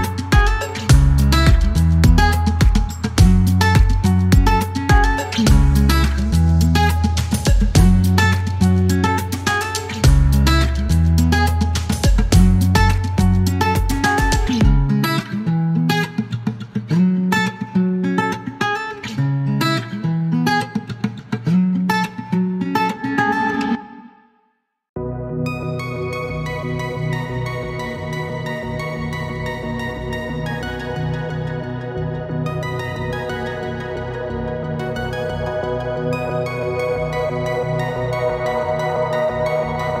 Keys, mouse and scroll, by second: 0.3 click, 2.2 click, 3.5 click, 5.0 -, 5.5 click, 6.1 -, 6.4 click, 9.7 click, 16.5 click, 19.7 click, 22.9 click, 25.0 click, 26.2 click, 27.2 click, 27.7 click, 28.1 click, 33.0 click, 34.5-36.1 drag, 37.3-40.0 drag.